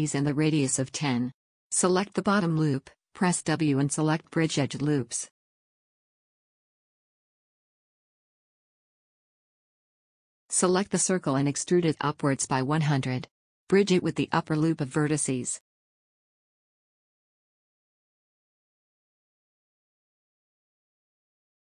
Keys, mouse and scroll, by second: 2.8-5.5 middle drag, 5.5 click, 5.9-7.6 right drag, 6.5 w, 10.5 middle click, 11.3 middle click, 12.0 a, 12.4 middle click, 13.1 click, 13.3 middle click, 13.5 middle click, 13.7 click, 14.3 middle click, 14.5-16.8 middle drag, 15.6 e, 17.7 middle click, 18.5 middle click, 20.1 middle click, 21.1 middle click, 21.1 w.